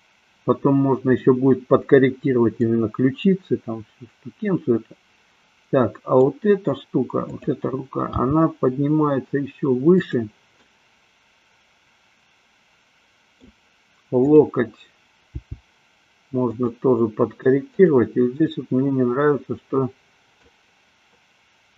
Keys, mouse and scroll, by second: 2.7-6.3 middle drag, 7.3 click, 8.2 g, 10.2 click, 10.5-13.5 middle drag, 15.4 g, 18.5-20.5 middle drag.